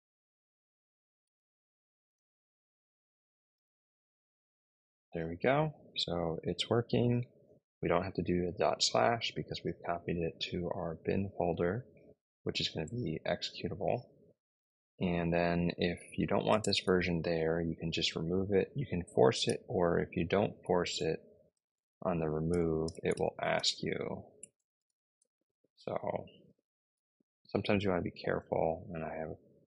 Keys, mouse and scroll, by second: 0.8-3.6 typing, 16.1-17.0 typing, 19.3-26.8 typing, 29.5-29.6 Left.